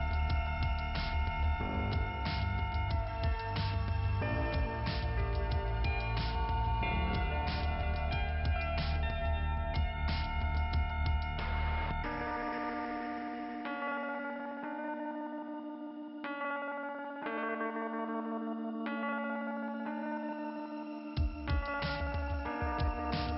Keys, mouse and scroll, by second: 0.1 click, 2.0 click, 4.9-5.2 scroll up 4, 6.0 middle click, 6.5 scroll up 1, 8.0 scroll down 2, 9.6 right click, 10.6 click, 11.5-11.9 scroll down 2, 14.7 click, 15.5 click, 18.4 ,, 18.9 click, 19.6 click, 20.5 click.